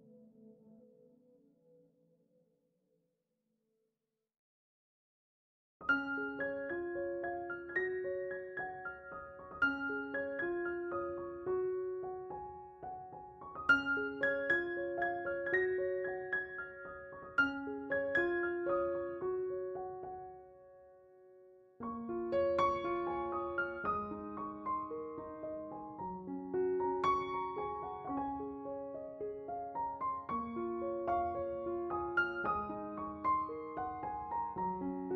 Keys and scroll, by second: 0.0 s, 3.6 s, 15.6 ctrl+z, 15.9 ctrl+z.